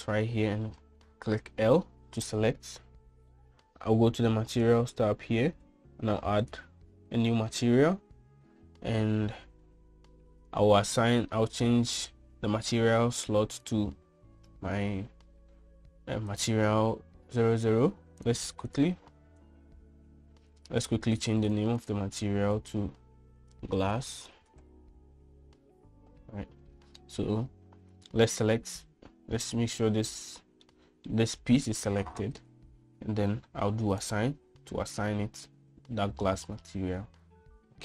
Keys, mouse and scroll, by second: 0.2 middle click, 2.4 l, 7.6 click, 14.6-17.5 drag, 19.8-27.9 drag, 25.4 BackSpace, 30.9 l, 31.7 middle click, 35.0 click.